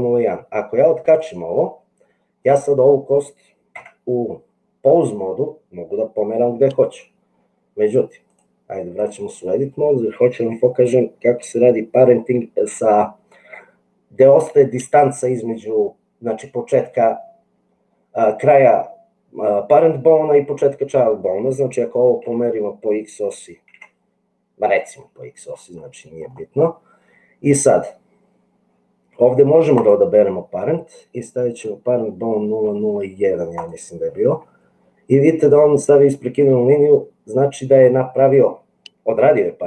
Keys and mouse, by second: 2.4 click, 4.2 Tab, 8.3-9.4 drag, 22.3 g, 29.8-33.8 drag.